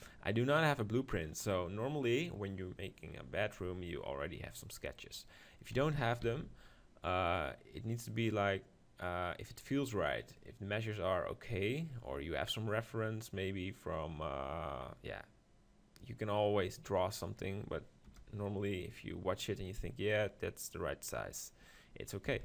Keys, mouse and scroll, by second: 0.0-1.9 drag, 4.5-8.1 middle drag, 5.7 s, 18.0 KP_0, 19.4-21.2 middle drag, 22.2 s.